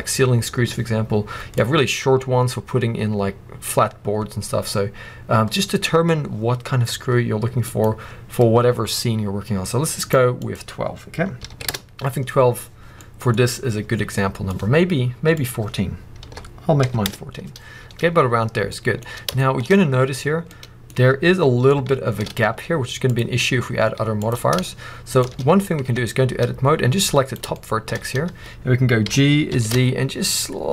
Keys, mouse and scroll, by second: 1.4-9.9 drag, 9.9 right click, 10.2-12.9 drag, 11.6 Return, 12.9 middle click, 13.2 scroll up 1, 13.9 scroll down 1, 14.0 middle click, 15.2-18.6 drag, 17.0 Return, 18.6 middle click, 19.5-25.8 middle drag, 19.7-20.4 scroll up 2, 20.8-21.6 scroll up 2, 22.4 z, 25.8 Tab, 26.9 click, 27.5 shift+middle click, 27.9 scroll up 1, 28.9 g.